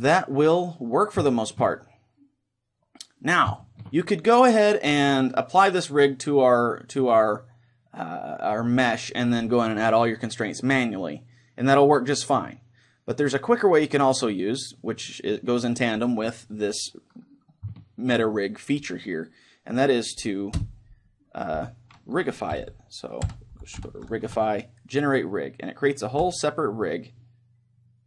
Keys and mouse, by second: 3.6-6.2 middle drag, 11.2-14.4 middle drag, 15.1-20.6 middle drag, 20.6 space.